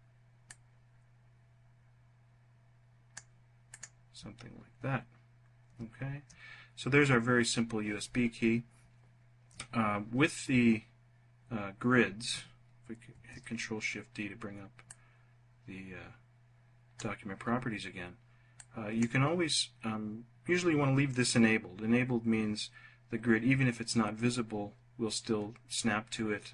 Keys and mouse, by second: 0.0-2.7 drag, 3.2 click, 12.6 ctrl+shift+d, 14.3 click, 18.0 click.